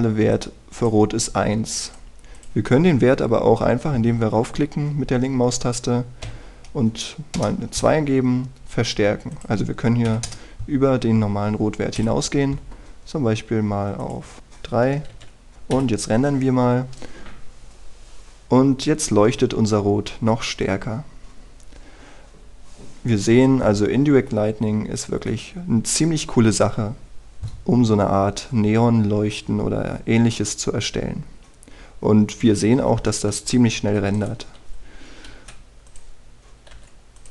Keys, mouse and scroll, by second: 7.2 KP_2, 10.3 click, 11.1 KP_3, 13.0 F12, 14.4 click, 15.5 Return, 16.7 F12, 31.2-33.0 scroll down 1, 33.6 Escape, 34.2-35.1 scroll down 1, 35.1 right click, 36.3 g, 36.8-37.3 drag.